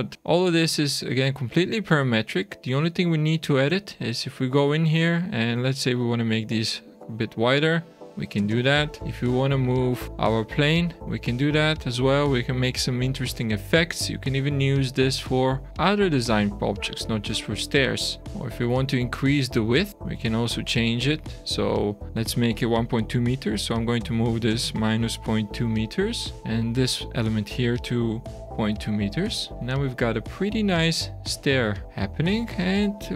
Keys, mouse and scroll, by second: 0.1 click, 1.4 shift+middle click, 2.1 middle click, 2.6 Tab, 4.1 click, 6.0 click, 8.3 Tab, 8.8 shift+middle click, 9.4 shift+scroll down 1, 10.0 click, 10.8 click, 13.3 shift+middle click, 14.6 shift+scroll down 1, 15.4 click, 18.3 Tab, 18.3 shift+middle click, 18.3 click, 18.7 Tab, 18.9 click, 19.3 Tab, 19.9 shift+middle click, 20.7 click, 21.0 click, 21.8 click, 26.4 click, 26.7 click, 29.4 Tab, 29.5 shift+middle click, 30.4 shift+scroll down 1, 30.7 Tab, 31.1-31.6 scroll up 5, 31.6 Tab, 31.8 scroll down 1, 31.9 middle click.